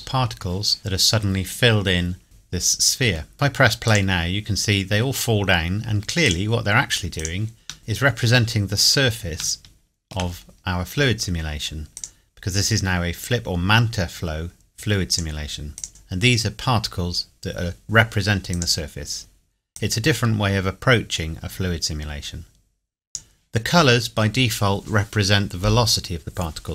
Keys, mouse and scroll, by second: 0.0 scroll down 1, 2.2 middle click, 3.2 scroll down 1, 3.9 click, 6.2 click, 7.8-8.7 scroll down 2, 8.7-9.2 scroll up 2, 9.6-10.2 shift+middle drag, 10.5-11.2 scroll up 2, 12.0 click, 15.1 click, 18.5 click.